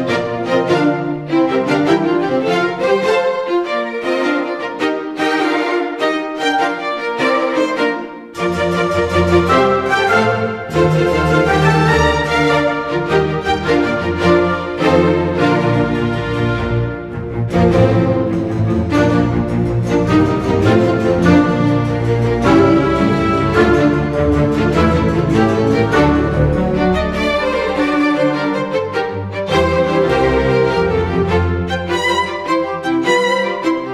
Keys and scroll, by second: 0.3 space, 1.3 +, 4.0 space, 11.7 space, 12.2 space, 12.9 space, 13.4 space, 14.6 space, 15.2 space, 20.9 Delete, 21.2 ctrl+d, 21.6 space.